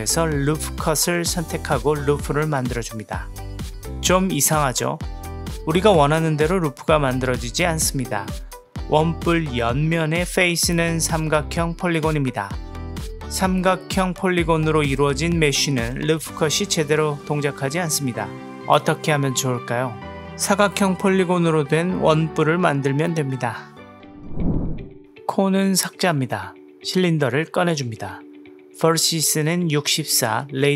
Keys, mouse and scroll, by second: 1.5-3.4 drag, 4.5 click, 5.3 click, 6.0 click, 6.8 click, 10.7 middle click, 17.4 Tab, 18.2 click, 19.8-23.2 middle drag, 23.5-24.1 drag, 25.4 Delete, 30.5-30.7 drag.